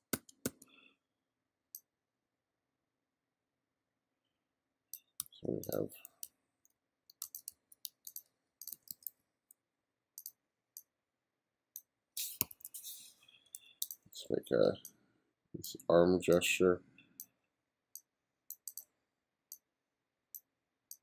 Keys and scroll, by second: 5.2 f, 6.3 g, 7.3 f, 7.9 g, 8.7 b, 12.4 2.